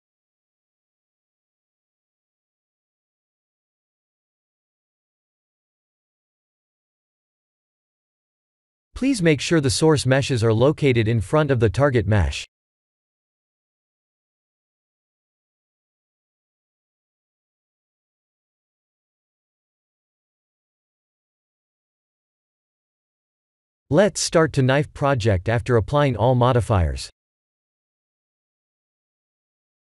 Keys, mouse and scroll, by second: 1.0-2.2 scroll down 2, 2.2 click, 3.6 click, 4.7 click, 5.5 click, 5.9 click, 8.0 click, 8.9 b, 9.9 KP_3, 10.4 KP_1, 11.0-12.0 scroll down 9, 11.7 middle click, 15.2 shift+middle click, 16.4 middle click, 16.4 middle click, 17.8 KP_1, 18.8 KP_3, 19.3-19.8 scroll up 4, 19.9 shift+middle click, 20.6-21.7 scroll up 2, 21.7 click, 22.2 shift+click, 22.7 Tab, 24.2 Tab, 24.4 click, 25.5 ctrl+a, 26.7 click, 27.5 shift+click, 28.7 Tab.